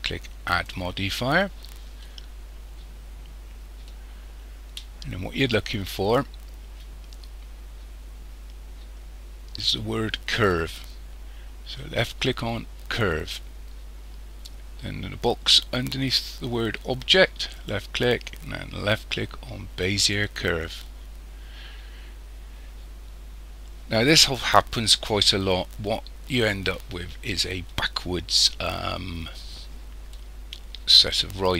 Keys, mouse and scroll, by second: 0.4 click, 17.5 click, 24.2-24.9 scroll up 2, 24.9-25.7 scroll up 3, 25.7-28.3 scroll down 2.